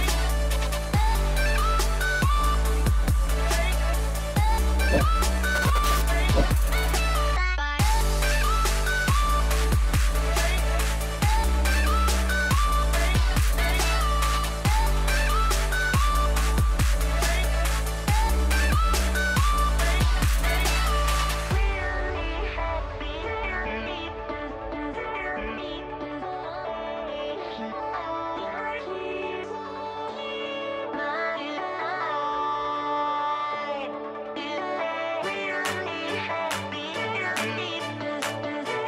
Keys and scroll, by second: 3.9 space, 5.1 space, 23.0 space, 24.2 space, 26.6 space, 28.9 space, 29.8 space, 30.9 space.